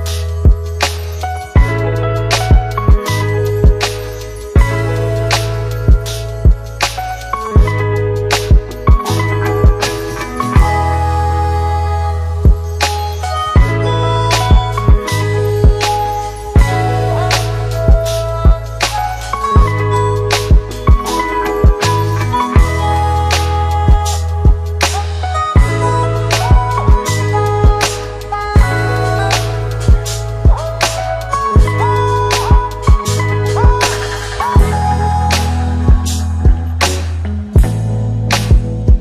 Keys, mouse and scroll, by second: 2.6 click, 3.9 click, 5.3 click, 8.2-10.5 drag, 14.8-20.2 click, 21.7 click, 24.2 Return, 25.6 click, 27.9-30.5 click, 33.2 Return, 35.1 click, 36.3 click.